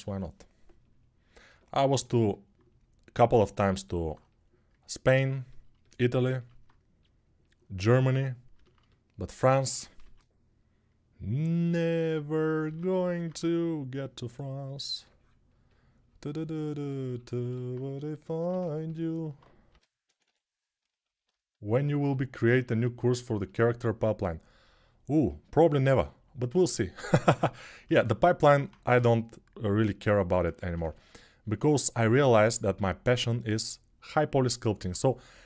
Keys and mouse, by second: 5.4-10.0 alt+drag, 9.8 shift+r, 12.5 ctrl+r, 15.4-34.8 shift+drag, 19.5 g, 19.8 ], 20.0 ], 28.7 g, 35.2 alt+shift+click.